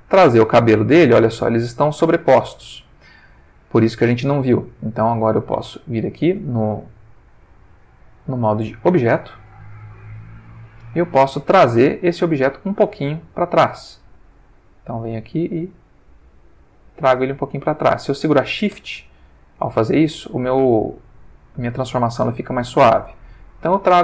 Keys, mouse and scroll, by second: 0.1 click, 1.3-3.9 middle drag, 5.7 click, 6.7 Tab, 7.5 ctrl+Tab, 9.2 click, 10.1 middle click, 10.8 middle click, 12.2-13.8 middle drag, 13.9 ctrl+shift+middle click, 15.2-24.0 drag.